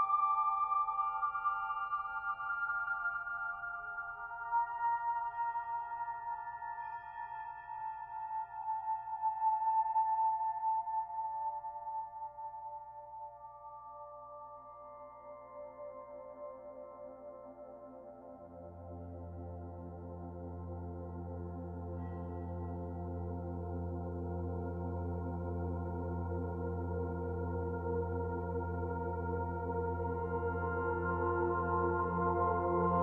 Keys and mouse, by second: 2.9-16.1 alt+drag, 16.1-16.4 typing, 17.4 typing, 17.7 Return, 20.1-32.2 drag.